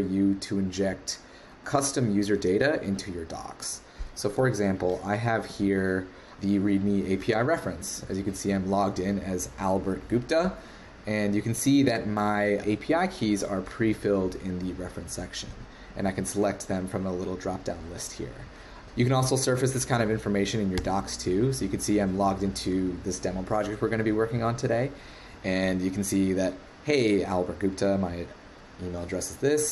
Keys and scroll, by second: 4.3 super+Tab.